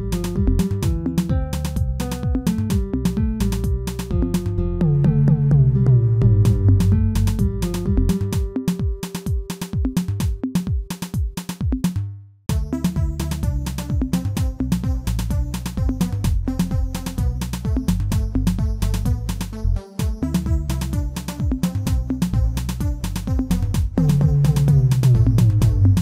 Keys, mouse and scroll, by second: 3.3 shift+middle click, 3.9-4.3 scroll up 1, 4.3-5.8 shift+middle drag, 5.8 e, 10.0 s, 11.0 middle click, 11.6-13.0 scroll down 2, 13.0 f, 16.1 w, 17.3 e, 20.1 m, 21.9-22.8 scroll down 1, 22.8 middle click, 23.7 Tab, 24.2-25.0 middle drag, 25.0 Tab, 25.9 alt+click.